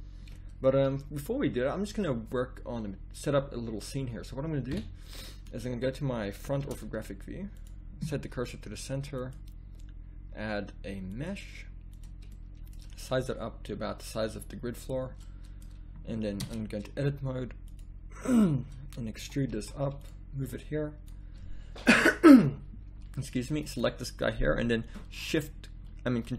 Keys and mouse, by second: 4.7 KP_1, 6.6 shift+s, 13.4 s, 16.4 Tab, 19.2 e.